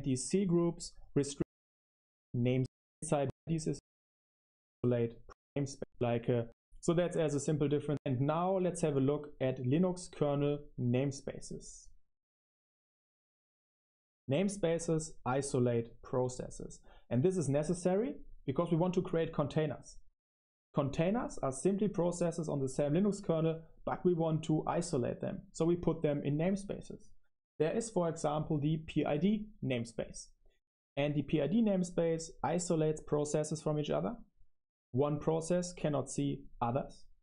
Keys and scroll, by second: 1.3-3.8 typing, 4.1 Left, 4.2 Left, 4.2 Left, 5.2 Left, 5.7 Left, 5.8 Left, 5.9 Left, 6.4 Right, 7.8 Right, 20.9 super+3, 22.1 super+7, 23.2-25.0 typing.